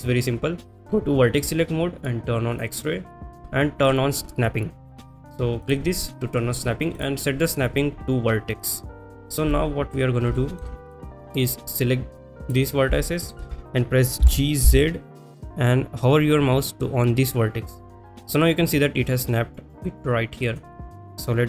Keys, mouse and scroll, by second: 2.6 click, 5.7 click, 7.0-9.1 drag, 10.5 shift+middle click, 11.7 click, 13.0 shift+middle click, 18.1 click, 20.6 click.